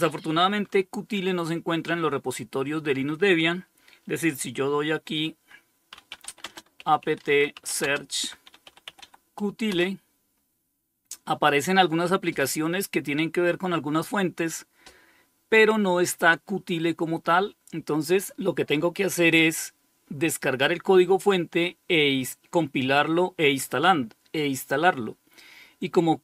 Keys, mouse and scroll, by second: 4.9-8.7 typing, 8.9 Return.